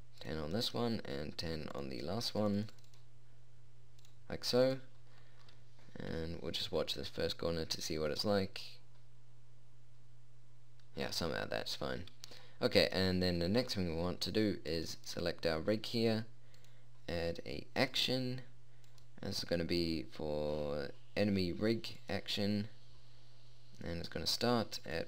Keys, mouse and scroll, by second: 6.6 p, 13.0-14.2 middle drag, 15.3-21.8 drag.